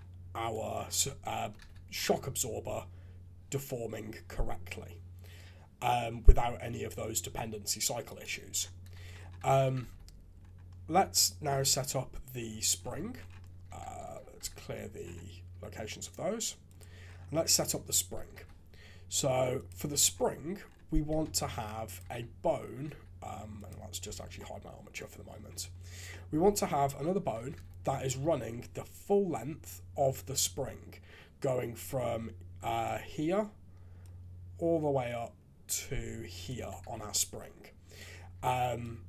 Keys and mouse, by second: 1.3 KP_3, 1.6 shift+z, 2.1 g, 9.0 shift+z, 9.5 alt+a, 9.8 shift+z, 11.0 Tab, 11.6 alt+a, 12.4 Tab, 13.6 a, 14.0 alt+g, 14.5 alt+a, 16.6 click, 17.7 Tab, 18.3 alt+a, 19.6 click, 21.2 ctrl+Tab, 22.1 alt+a, 22.9 shift+z, 24.0 h, 24.4-25.4 drag, 26.1-26.4 drag, 27.3 KP_3, 27.5 shift+z, 31.8-32.5 d, 32.9-34.0 d, 34.0-36.5 drag, 36.4 d, 36.8 shift+z, 38.3 d, 38.8-39.0 drag.